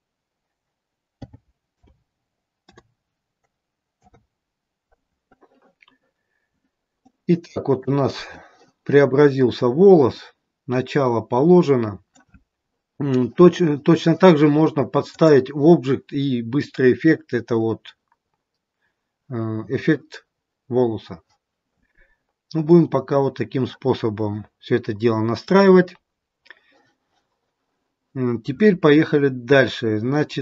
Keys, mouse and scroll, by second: 6.1-7.1 scroll up 2, 7.1 middle click, 9.1 middle click, 14.9 click, 22.3-22.7 scroll down 1, 22.7 middle click, 29.4-30.4 scroll down 2.